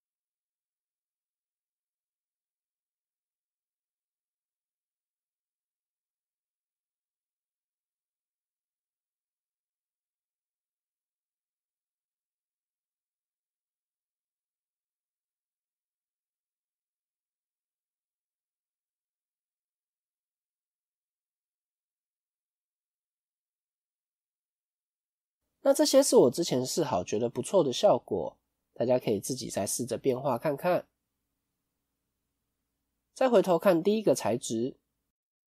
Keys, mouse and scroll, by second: 15.6 scroll up 5, 16.1-16.7 scroll up 2, 16.7 middle click, 24.9-25.3 scroll up 2, 31.8-32.9 scroll down 2, 33.6 click.